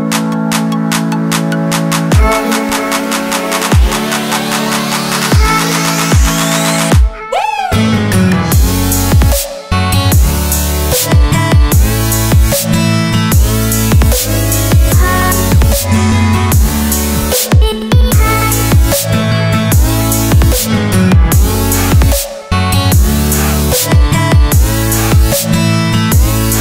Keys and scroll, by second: 9.9 F2, 14.2 F2, 15.5 Delete, 19.9 e, 23.7 e, 25.5 c.